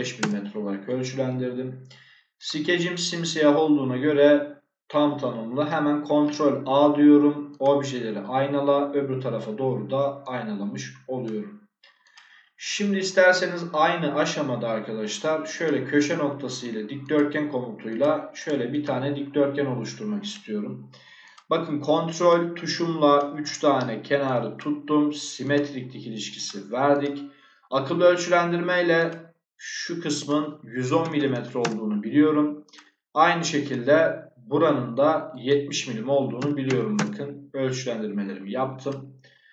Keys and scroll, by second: 0.1 Return, 6.1 ctrl+a, 30.9 1, 31.2 0, 31.5 Return, 36.3 7, 36.6 0, 36.9 Return.